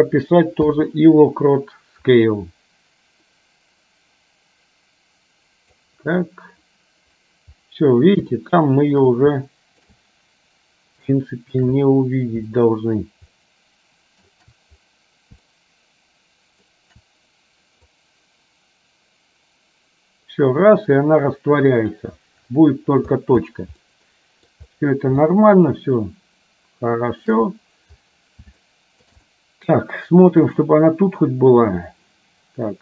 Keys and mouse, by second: 2.3-6.0 drag, 8.4 shift+middle click, 9.4 shift+middle click, 11.3 shift+middle click, 12.6 shift+middle click, 13.4 shift+middle click, 15.6-16.8 shift+middle drag, 18.1-22.1 drag, 23.9 middle click, 25.4-27.3 shift+middle drag, 28.6 shift+middle click, 29.4 middle click, 30.8-32.8 drag.